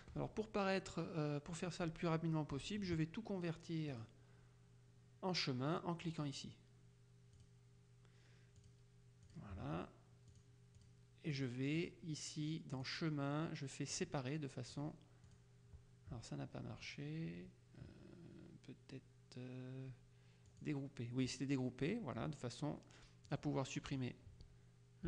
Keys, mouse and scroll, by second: 4.0 click, 6.2 click, 7.4 click, 8.7 click, 9.4 click, 10.4 click, 12.9 click, 14.0 click, 14.8 click, 20.6 click, 23.4 click.